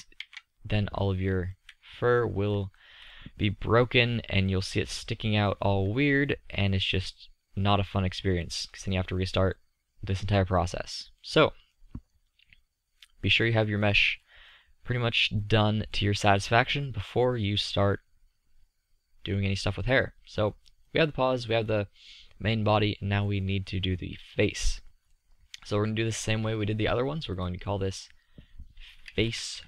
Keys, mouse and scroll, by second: 0.4 Tab, 7.3-8.4 middle drag, 11.5 middle click, 14.5 middle click, 27.0-28.6 drag, 28.6-29.6 right drag.